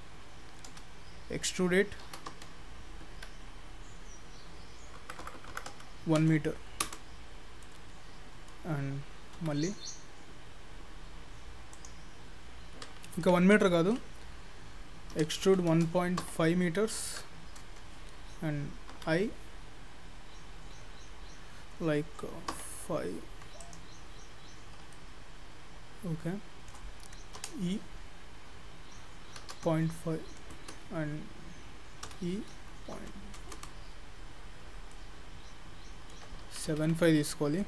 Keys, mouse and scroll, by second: 0.7 e, 7.7 middle click, 9.4 i, 13.2 ctrl+z, 13.5 ctrl+z, 15.2 e, 19.0 i, 24.1 scroll down 1, 24.4-24.8 scroll up 2, 24.9 shift+middle click, 27.4 e, 32.1 e, 34.0-34.4 scroll down 2, 34.4-34.9 scroll up 3, 34.9 middle click, 36.5 ctrl+z, 36.7 ctrl+z.